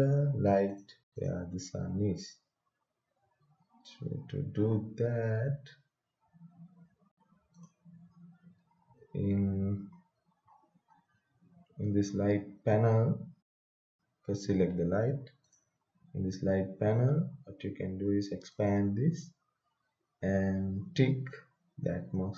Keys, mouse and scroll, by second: 0.7 click, 2.4-3.7 scroll down 1, 4.6-5.5 scroll up 1, 6.1-7.5 scroll down 1, 7.5 click, 9.0-10.6 scroll up 1, 14.0-15.4 scroll down 1, 15.4 click, 17.4-18.5 scroll down 1, 18.5 click, 19.3-20.9 scroll down 1.